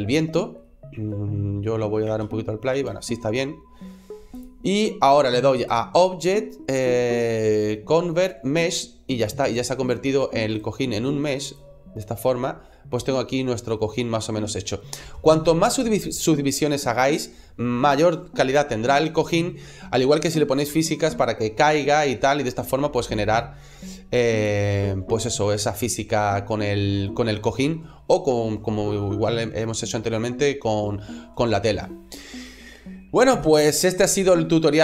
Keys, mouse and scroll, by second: 1.9 space, 2.7 space, 4.2 click, 5.5 click, 9.3 right click, 10.4 right click, 11.4 click, 12.3 middle click, 22.8 click, 24.6 middle click.